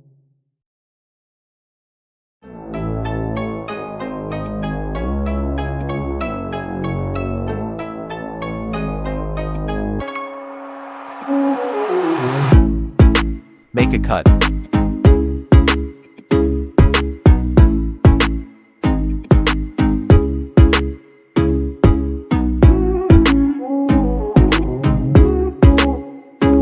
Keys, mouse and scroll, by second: 4.5-8.6 drag, 9.3-11.0 drag, 11.9 ctrl+a, 14.4 right click, 15.9 click, 19.3 alt+shift+click, 22.9 ctrl+z, 24.4-26.5 alt+drag.